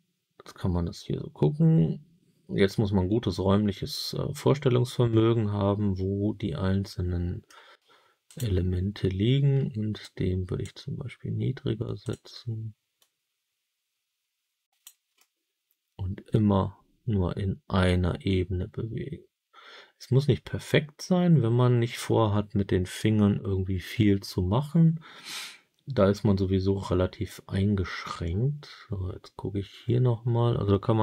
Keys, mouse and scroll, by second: 8.2 click, 9.9 click, 11.9 click, 12.9-14.7 drag, 15.1-30.9 alt+middle drag.